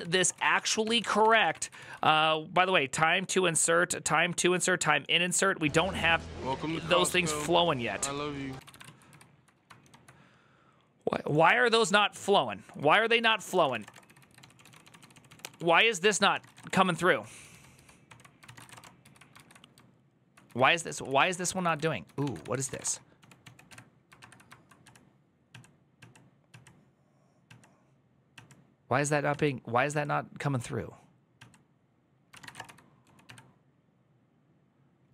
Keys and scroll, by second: 0.0-1.9 typing, 8.3 ctrl+a, 8.5 [, 8.6 ctrl+u, 8.8 ctrl+u, 9.6 ctrl+d, 13.0 ctrl+a, 13.0-19.0 typing, 13.1 ctrl+c, 19.1 ctrl+u, 20.0-26.3 typing, 31.9-33.3 typing, 34.8-35.1 typing.